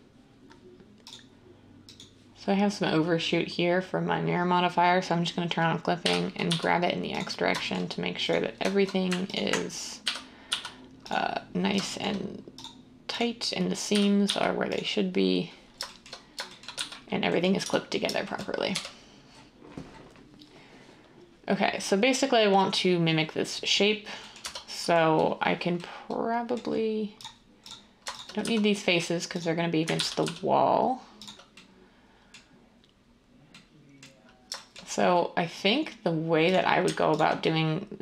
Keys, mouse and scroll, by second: 6.0-6.5 typing, 10.0-10.5 typing, 13.9-14.2 typing, 16.7-18.7 typing, 24.4 Tab, 28.4 x, 29.9 ctrl+z, 30.2 x.